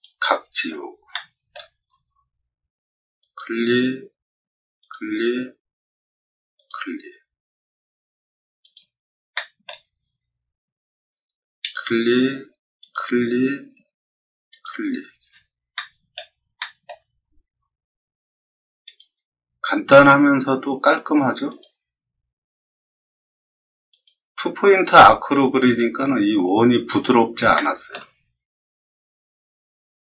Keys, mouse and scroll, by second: 0.6 scroll up 2, 1.0-1.4 shift+middle drag, 1.8-2.5 scroll up 4, 3.1 click, 4.7 click, 6.5 click, 8.6 click, 9.3-9.6 shift+middle drag, 11.5 click, 12.7 click, 14.4 click, 15.2 scroll up 2, 15.7 shift+middle click, 16.5 shift+middle drag, 17.1 middle click, 18.8 click, 21.4 click, 23.8 click, 27.5-27.8 shift+middle drag, 28.3-28.8 middle drag.